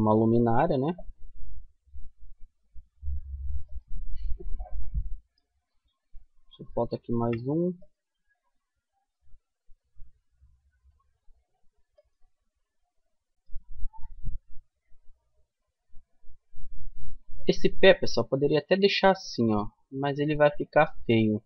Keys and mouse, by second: 3.7-6.3 middle drag, 6.3 ctrl+r, 11.8-14.1 middle drag, 13.3 Tab, 15.6-19.4 middle drag, 21.2 Tab.